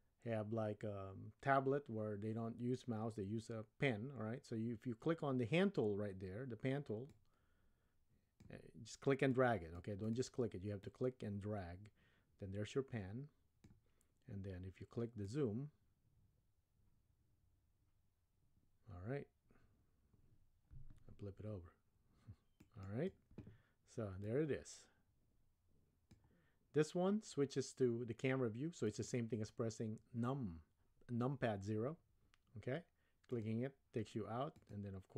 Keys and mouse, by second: 7.2-8.5 drag, 9.4 click, 10.1 click, 11.0-13.7 drag, 15.2-23.1 drag, 24.3-26.1 drag, 28.9 click, 33.3 click, 34.5 click.